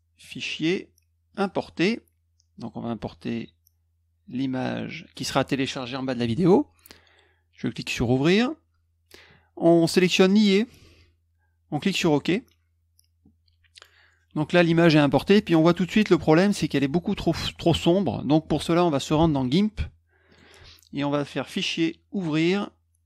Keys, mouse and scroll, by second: 0.2 click, 1.3 click, 4.2 click, 7.9 click, 9.8 click, 10.1 click, 11.9 click, 19.2 alt+Tab, 20.3 alt+click, 21.4 click, 22.1 click.